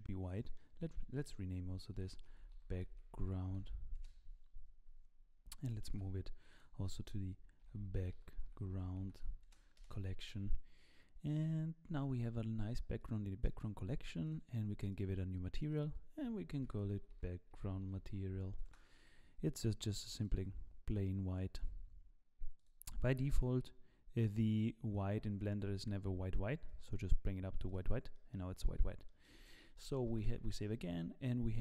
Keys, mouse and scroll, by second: 0.3 middle click, 0.9 F2, 7.3 shift+m, 12.6 click, 13.0 click, 13.4 middle click, 14.2 click, 14.9 click, 16.1 click, 20.2 click, 22.5 click, 27.6 click, 28.1 middle click, 28.6-29.2 scroll up 3, 29.2 shift+middle click, 30.1 ctrl+s, 30.6 scroll down 3.